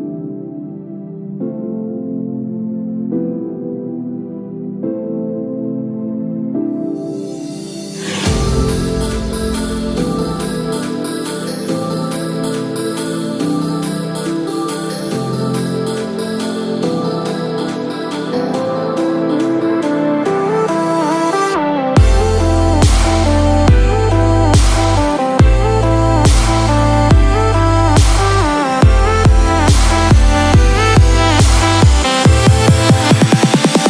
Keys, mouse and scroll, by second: 0.5 click, 3.4 middle click, 3.4-4.4 scroll down 8, 3.8 middle click, 4.4 shift+middle click, 4.9 middle click, 5.3-5.7 scroll up 2, 5.9-7.4 scroll up 10, 12.1 shift+middle click, 13.3-13.7 scroll up 1, 13.7 scroll down 1, 14.1 shift+middle click.